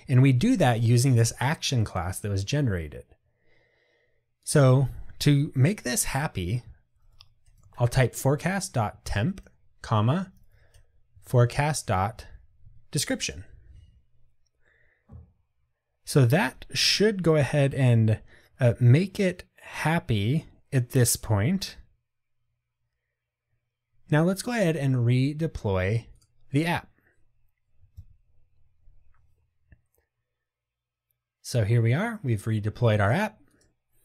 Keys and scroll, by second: 9.0 Tab, 26.3 ctrl+r.